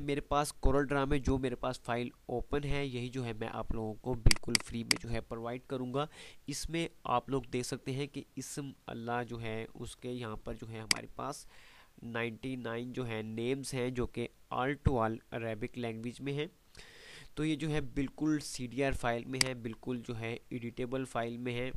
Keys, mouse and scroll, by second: 10.1 F2, 10.9-12.8 drag, 16.9 F3, 19.2 F2, 19.2 click, 19.5-20.5 F2.